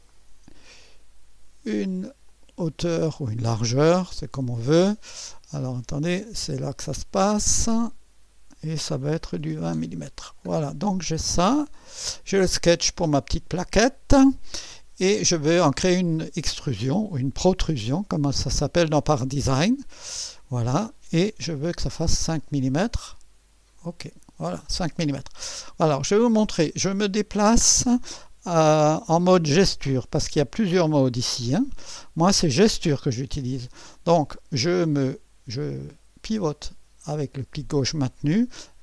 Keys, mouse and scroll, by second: 0.1 click, 2.2 click, 2.7-3.1 typing, 7.8 click, 9.0-10.0 typing, 10.5-10.8 scroll down 1, 11.8 click, 12.9 click, 20.1 click, 21.7 5, 23.8 click, 25.4 click, 26.8-28.1 drag, 30.7 click, 33.9 click, 34.6-38.1 drag, 38.6-38.8 right drag.